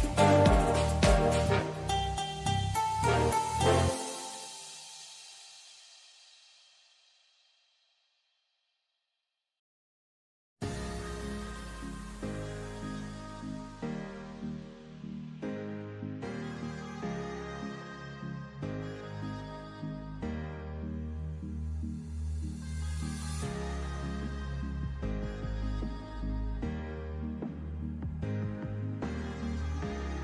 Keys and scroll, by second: 6.9 super+d.